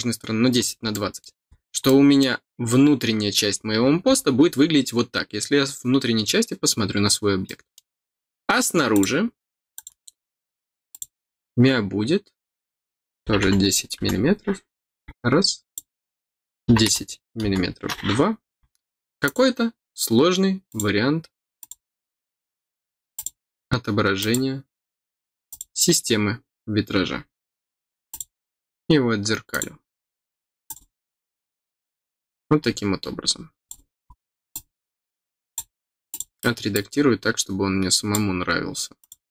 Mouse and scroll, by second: 0.8 scroll down 1, 1.1 middle click, 1.4 scroll down 1, 1.8 middle click, 3.5-4.3 scroll down 4, 7.4 middle click, 8.9 click, 9.7 click, 10.9 click, 15.6 click, 19.2 click, 20.6 click, 21.5 click, 23.1 click, 24.1 click, 25.4 click, 28.1 click, 29.5 click, 30.6 click, 32.2 middle click, 32.2 scroll up 1, 32.6 scroll down 2, 33.6 click, 33.9 scroll down 2, 34.5-35.5 drag, 36.1 click, 36.7-38.1 drag, 39.0 click.